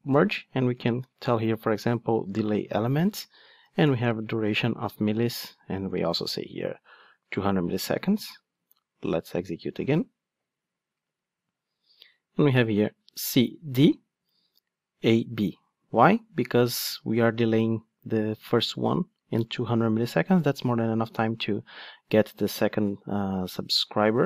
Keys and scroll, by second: 1.9 Return, 7.9 ctrl+shift+d.